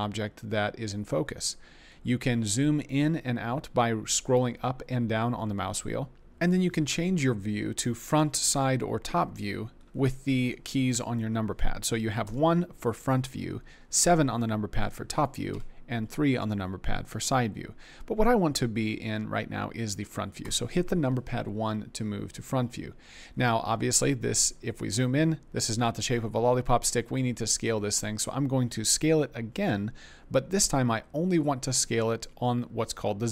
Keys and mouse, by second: 12.2 KP_1, 14.0 KP_7, 15.5 KP_3, 20.4 KP_1.